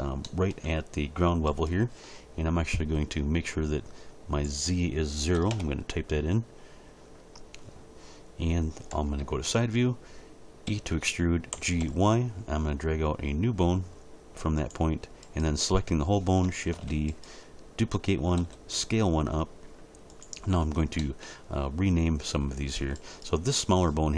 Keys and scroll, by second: 5.4 0, 5.5 Return, 8.9 1, 9.2 3, 10.7 e, 11.5 g, 11.8 y, 16.7 shift+d, 18.4 s.